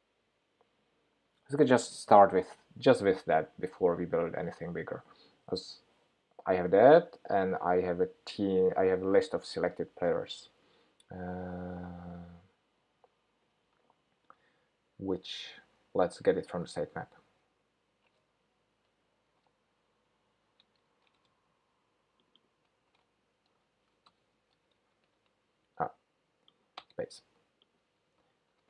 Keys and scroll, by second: 23.0 super+c, 23.9 super+v.